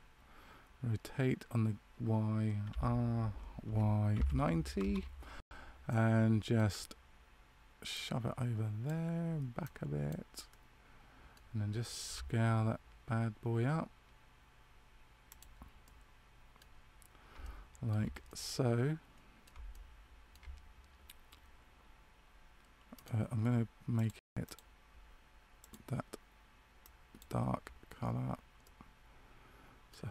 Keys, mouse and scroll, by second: 5.9 middle click, 7.9 click, 10.5 middle click, 12.1 s, 15.8 middle click, 17.5 shift+middle click, 18.2 middle click, 19.8 shift+middle click, 22.9 right click, 23.9 click, 24.3 click, 25.5 click, 28.6 middle click.